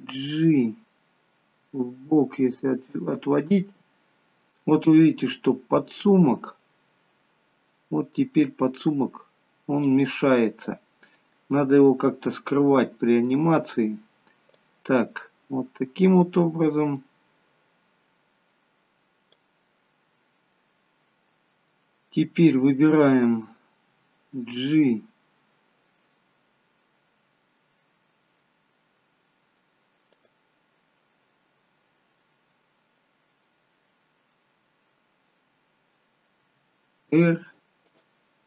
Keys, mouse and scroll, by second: 0.0 g, 10.4 middle click, 14.8 click, 20.0-20.4 scroll down 2, 20.4 middle click, 24.0 g, 36.4 r.